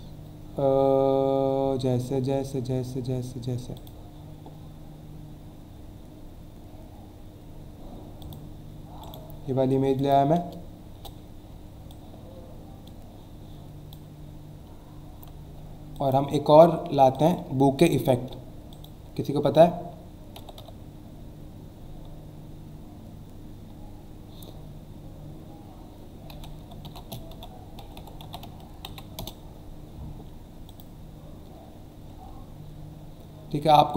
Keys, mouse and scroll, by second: 2.4 scroll down 1, 3.7 click, 5.4 scroll down 1, 7.1 scroll down 1, 8.2 click, 8.4 click, 9.0 right click, 10.0 click, 10.9 Return, 11.9 click, 14.8 alt+scroll up 1, 15.9 click, 17.1 click, 18.7 click, 20.1-21.1 typing, 26.1-29.2 typing, 30.7 click, 32.6 scroll down 1, 33.5 scroll down 1.